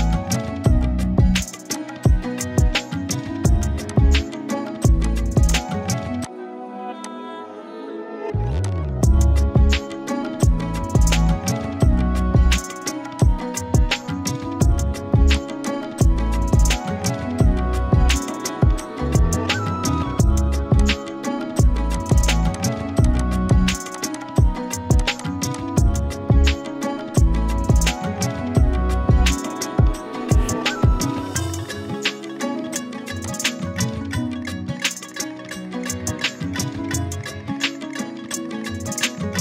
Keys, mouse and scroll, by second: 0.3-0.9 alt+shift+drag, 1.7-3.8 shift+drag, 5.0 shift+click, 5.5 alt+click, 9.6 Down, 13.1 click, 13.3-14.7 z, 15.3-16.3 drag, 18.6 z, 18.8-24.8 click, 19.1-19.9 z, 24.9 click, 26.7 shift+Down, 27.5 ctrl+z, 27.8 Down, 28.5 Left, 30.8 Down, 33.2 click, 33.8 Right.